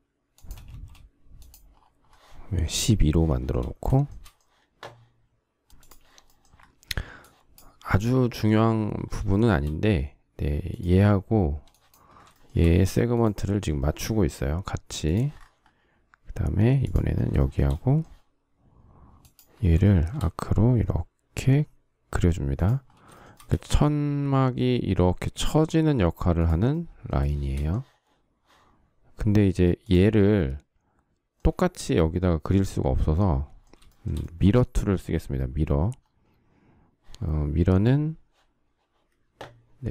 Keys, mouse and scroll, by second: 0.6 space, 3.2 shift+middle click, 9.2 shift+middle click, 12.3 shift+middle click, 13.8 shift+middle click, 17.2 shift+middle click, 19.7 shift+middle click, 23.1 shift+middle click, 23.2 shift+middle click, 23.5 space, 27.1 shift+middle click, 33.7 shift+middle click.